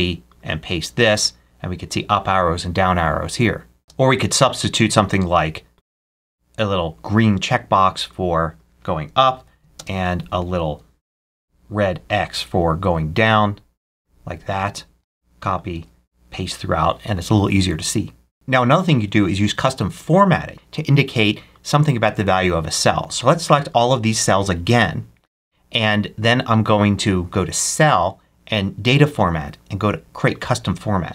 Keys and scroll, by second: 0.6 super+v, 3.8 ctrl+super+space, 9.2 BackSpace, 9.6 ctrl+super+space, 10.6 ctrl+super+x, 14.9 super+c, 15.6 super+v.